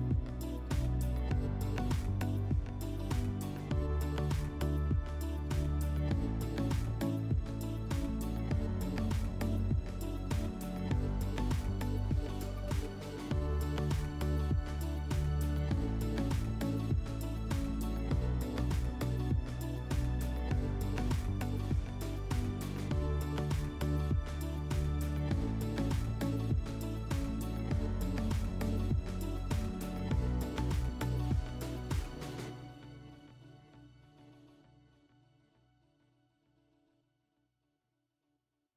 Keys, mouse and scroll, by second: 1.0 click, 3.7 click, 6.9 click, 12.3 click, 14.4 click, 14.6 click, 15.3-17.2 typing, 16.1 Tab, 33.0-35.1 drag, 35.2-37.3 middle drag.